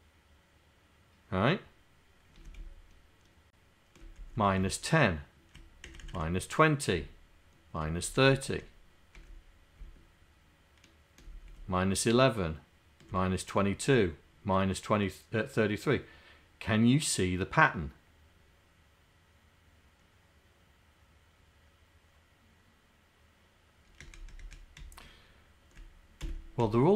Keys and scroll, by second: 2.4 Down, 2.7 Left, 4.2 Left, 4.4 Left, 4.7 Right, 5.9 Right, 6.2 Right, 6.9 Right, 8.1 Right, 9.9 Left, 11.5 Left, 12.2 Right, 24.0 Up, 24.4 Up, 24.8 Left, 26.3 Left.